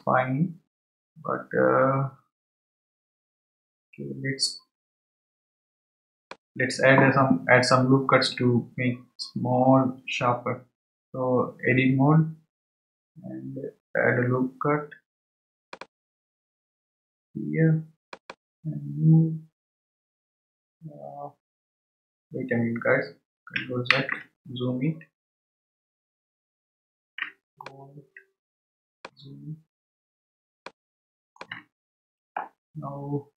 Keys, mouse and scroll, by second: 15.7-21.1 drag, 25.1 scroll down 4, 25.7-27.2 scroll up 7, 28.3 shift+middle drag, 28.6 middle click, 30.0 scroll up 2, 30.6-33.3 shift+middle drag.